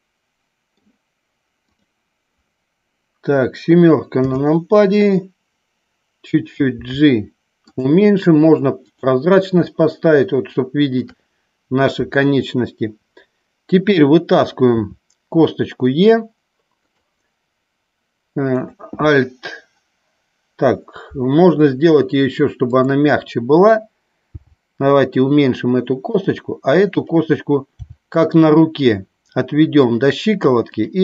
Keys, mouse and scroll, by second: 1.7 click, 4.1 KP_7, 6.7 g, 7.7 click, 9.5-11.0 shift+middle drag, 22.5 click, 24.3 g, 26.0 click, 26.9 click, 27.6 g, 29.8 click.